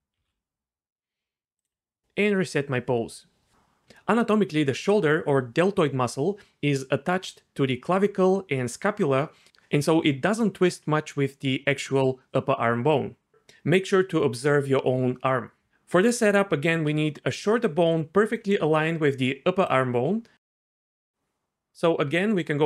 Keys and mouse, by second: 0.2 a, 1.6-3.2 drag, 15.4 d, 16.8-21.1 d, 17.4 click, 19.6 click, 22.0 Tab.